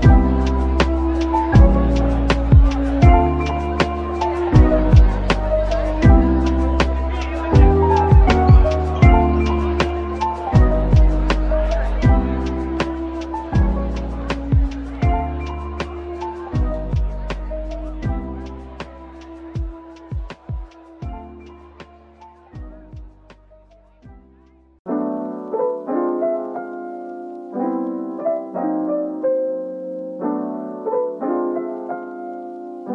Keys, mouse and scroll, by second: 1.9 scroll up 1, 3.7 scroll up 1, 6.4-7.2 typing, 10.8 typing, 11.9 typing, 14.1-14.8 scroll up 1, 14.6-15.4 typing, 16.6-17.6 typing, 17.6 Return, 19.3 typing, 21.6 typing, 23.2 Tab, 23.5-23.8 scroll, 23.8 middle click, 24.5-25.6 scroll down 1, 25.6 middle click.